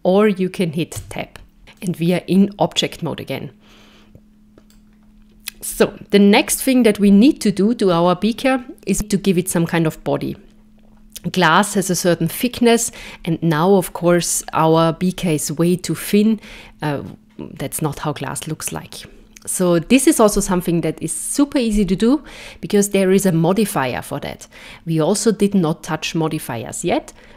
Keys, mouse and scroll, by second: 1.0 Tab, 1.8 middle click, 6.5 KP_0, 14.0-17.4 scroll up 4.